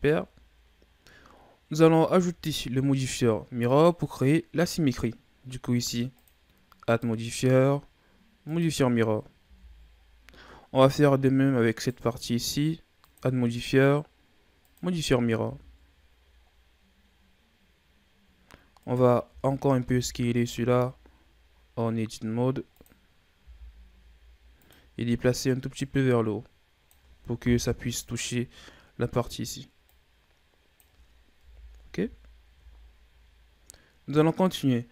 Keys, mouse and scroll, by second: 0.0-1.2 scroll down 5, 1.2-2.5 scroll up 4, 2.6-3.7 scroll up 2, 3.7 right click, 6.1-9.4 drag, 9.4 a, 9.9-10.4 scroll down 1, 10.4-11.7 scroll up 2, 11.7 right click, 13.0-15.4 drag, 15.4 a, 15.7-16.5 scroll down 4, 16.5-17.5 scroll down 2, 17.5-18.5 scroll up 7, 18.7 right click, 19.2 Tab, 19.8 s, 23.4 s, 25.8-27.4 drag, 27.4 KP_3, 28.3-29.2 scroll up 2, 29.9-31.4 drag, 31.4 KP_1, 31.8 Tab, 32.5 a, 32.7-34.5 scroll down 2.